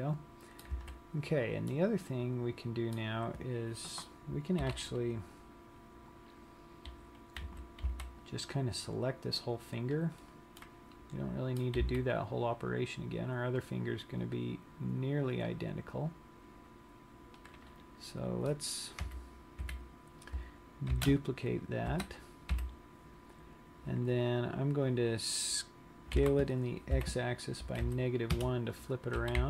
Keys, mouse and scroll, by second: 0.9 a, 2.0 middle click, 7.7 z, 8.2 c, 10.8 middle click, 12.1 c, 19.2 KP_1, 20.0 KP_3, 21.2 shift+d, 22.6 KP_1, 24.7-25.0 scroll up 2, 26.8 s.